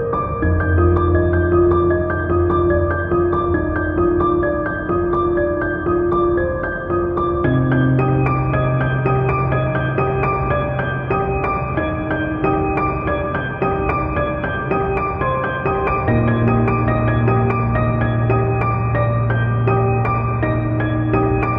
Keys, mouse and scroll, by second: 0.0 3, 0.1 alt+click, 0.3 p, 0.3 Tab, 0.4 click, 0.7 ctrl+j, 1.0 click, 1.1 Tab, 1.2 click, 1.3 a, 1.5 middle click, 1.5 space, 1.6 Return, 1.7 Tab, 1.7 middle click, 1.8 click, 1.8 Tab, 1.9-4.2 middle drag, 4.2 scroll down 1, 4.6 scroll up 1, 4.7 shift+click, 4.9 ctrl+j, 5.0 Tab, 5.2 a, 5.2 space, 5.6 Return, 5.8 scroll down 1, 5.9 Tab, 6.3 middle click, 6.4 ctrl+r, 6.7-9.8 typing, 7.0 shift+click, 7.7 shift+middle click, 8.4 click, 8.6 shift+click, 9.7 click, 10.3-14.2 middle drag, 11.3 scroll down 2, 12.5 KP_1, 12.6 scroll up 2, 12.9 scroll down 2, 13.7 scroll up 1, 13.8 Tab, 13.9 3, 14.1 Tab, 14.3 Tab, 14.3 click, 14.6-14.9 middle drag, 14.8 Tab, 14.9 click, 15.0 ctrl+r, 15.2 Escape, 15.3 KP_1, 15.3 z, 15.4 scroll up 2, 15.6 g, 15.9 click, 16.2 Tab, 16.2 middle click, 16.5 alt+click, 16.7 middle click, 16.8 KP_1, 16.9 g, 17.2 click, 17.4-17.9 scroll up 2, 17.9 scroll down 2, 18.0-19.9 middle drag, 18.2 KP_1, 18.7 scroll up 1, 18.9 z, 19.1 scroll down 1, 19.4 z, 19.9 click, 20.5 click, 20.7 scroll up 1, 20.8 middle click, 21.3 middle click, 21.3 scroll down 1, 21.5 click.